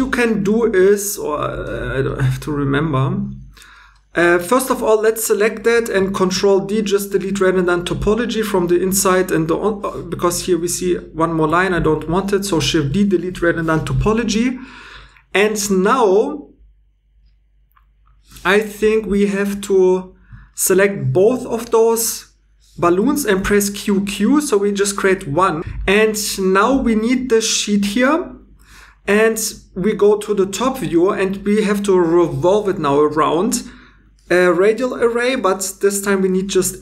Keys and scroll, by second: 6.2 super+d, 11.7 super+d, 23.0 q, 23.3 q, 35.8 scroll down 1.